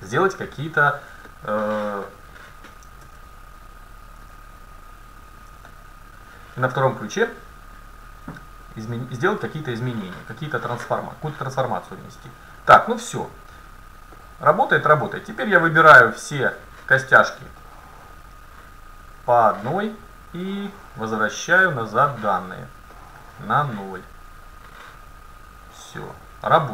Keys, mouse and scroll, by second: 0.6 middle click, 12.3-16.0 drag, 16.4-18.6 right drag, 17.6-19.6 drag, 19.2-21.1 right drag, 20.4-22.3 drag, 21.9-23.0 right drag, 23.6 click, 24.8-26.6 right drag, 25.6-26.7 drag.